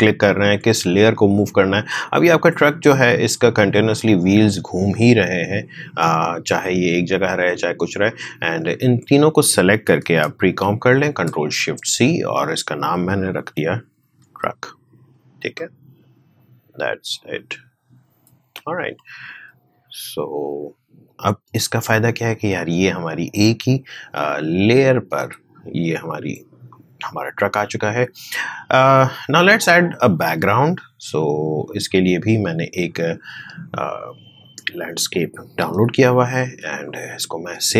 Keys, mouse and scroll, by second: 2.8-4.8 drag, 4.8 space, 8.5 click, 10.6 ctrl+shift+c, 13.1-15.2 typing, 17.3-21.4 drag, 21.4 space, 26.6-29.3 drag, 29.3-30.7 scroll down 1, 31.8 click, 35.7 Delete, 36.6 space, 36.8 click, 37.1 space.